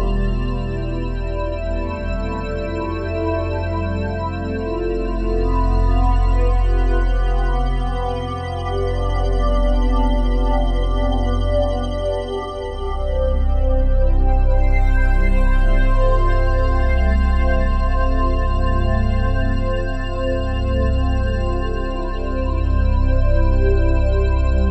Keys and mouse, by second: 0.6 click, 1.5 alt+shift+click, 2.3 ctrl+alt+click, 4.5-8.3 drag, 9.7 ctrl+alt+click, 11.1-12.2 alt+drag, 13.0 click, 16.5-17.8 drag, 19.5-20.6 drag, 22.5 click, 24.3 click.